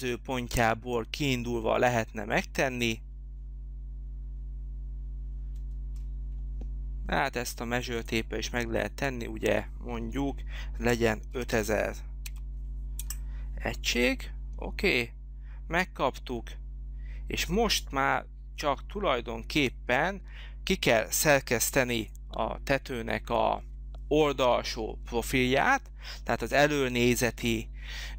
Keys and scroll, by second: 10.8 5, 11.3 0, 12.9 Return.